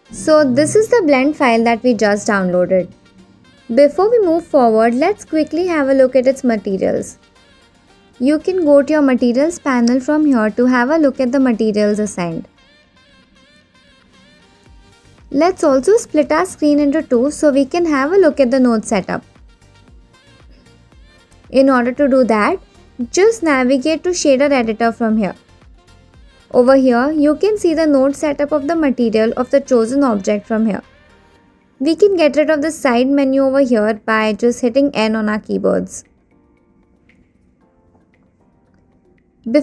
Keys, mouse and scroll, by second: 0.1-5.2 middle drag, 5.2 click, 10.0 click, 14.4 click, 19.0-20.3 drag, 21.2-22.4 middle drag, 24.2-28.0 drag, 28.8-29.7 scroll up 4, 29.7 middle click, 35.6 n.